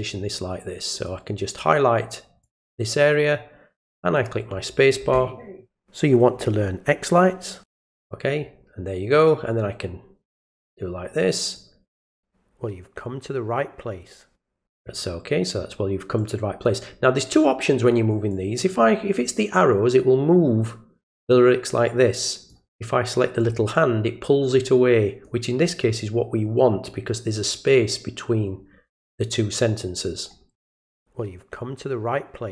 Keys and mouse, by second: 1.0 click, 2.4-4.1 drag, 11.5 click, 16.2 click, 17.3 click, 18.3-22.5 drag, 23.4-25.2 drag, 30.7 click.